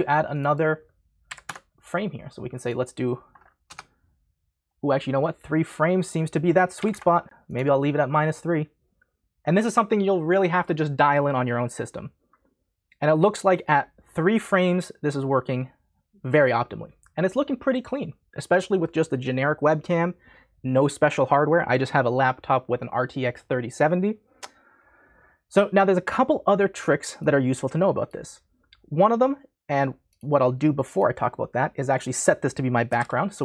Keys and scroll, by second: 1.3 4, 1.4 Return, 3.7 BackSpace, 6.8 3, 6.9 Return, 32.6-33.4 typing.